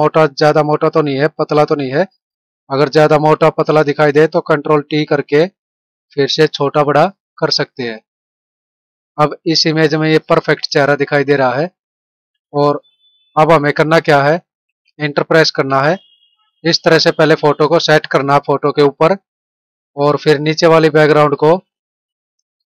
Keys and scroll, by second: 4.6 ctrl+t, 8.6 Right, 10.5 Down, 14.3 ctrl+-.